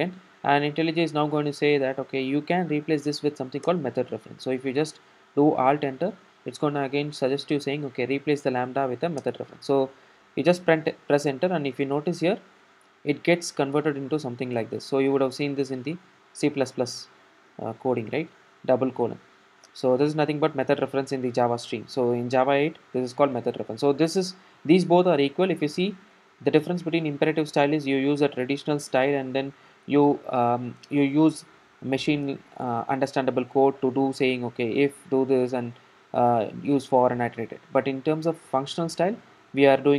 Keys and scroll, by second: 3.7 alt+Return.